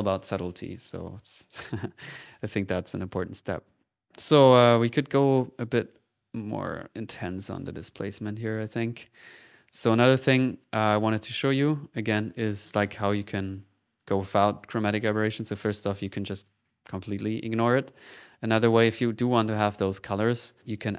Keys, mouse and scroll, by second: 2.1 middle click, 2.5-3.9 drag, 4.1 middle click, 4.4-5.9 drag, 6.4 click, 9.1 middle click, 9.8-11.2 drag, 11.2 middle click, 11.5 click, 12.1 click, 12.8 click, 13.3 click, 14.8 click, 16.1 click.